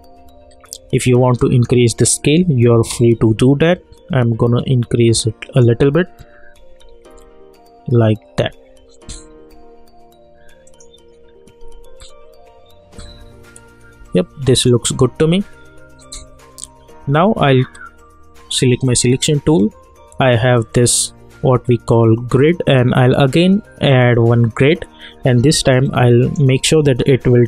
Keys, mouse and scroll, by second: 0.9 s, 1.4-6.5 drag, 6.5 Right, 10.6 click, 13.1 Left, 14.5 click, 18.8 click, 21.8 click, 21.8-26.6 drag, 26.6 alt+scroll up 1.